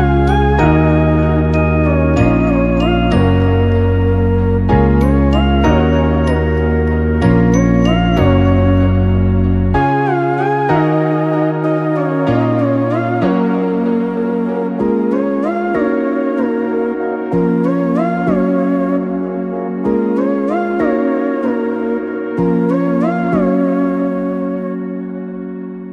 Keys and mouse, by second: 0.8 Tab, 2.6 w, 4.9 right click, 5.4 Tab, 5.9 right click, 6.1 g, 8.1 Tab, 8.6-9.1 middle drag, 9.5 KP_3, 10.1 Tab, 10.8 right click, 11.3 right click, 11.8 g, 13.8 middle click, 14.9 middle click, 15.5 c, 17.0 w, 20.0 middle click, 20.9 KP_3, 21.6 right click, 21.8 g, 22.8 KP_1, 23.5 Tab, 24.5 right click, 25.2 middle drag, 25.6 shift+middle click.